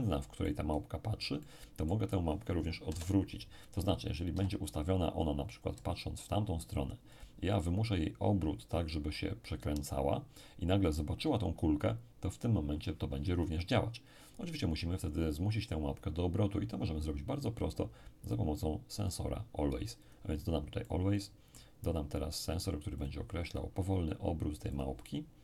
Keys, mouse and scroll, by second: 0.4-2.8 middle drag, 2.8 KP_7, 4.3 r, 7.1 ctrl+click, 16.9-18.0 scroll down 1, 18.2-22.5 drag, 20.8-22.5 middle drag, 23.0-24.5 drag, 24.7-25.4 drag.